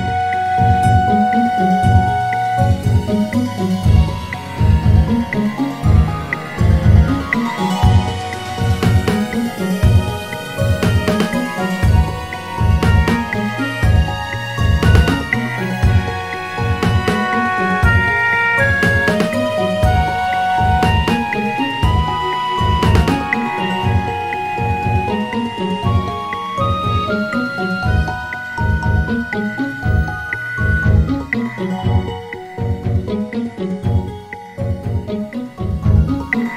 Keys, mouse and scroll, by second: 1.8 click, 2.4 alt+shift+click, 3.4 s, 7.0 Tab, 7.6-9.6 scroll down 1, 9.6-11.5 drag, 13.0-13.4 scroll down 2, 13.5 shift+a, 21.1 click, 22.8 r, 25.4 s, 27.3 g, 28.7 s, 32.2 click, 32.9-34.6 scroll up 2, 34.6 click, 35.2-36.3 scroll up 2, 36.3 g.